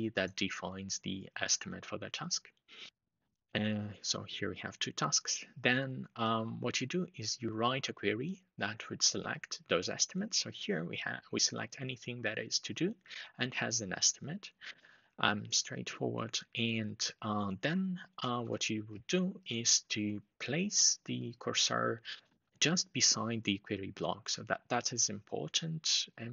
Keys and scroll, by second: 18.0 shift+super+Left, 18.5 Delete.